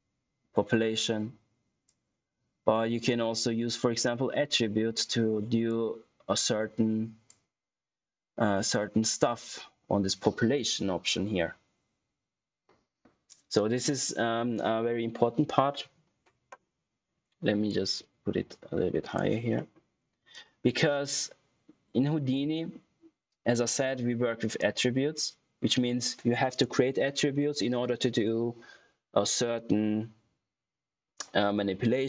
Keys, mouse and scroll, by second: 5.6 click, 17.8 click, 19.5 middle click, 20.2 click.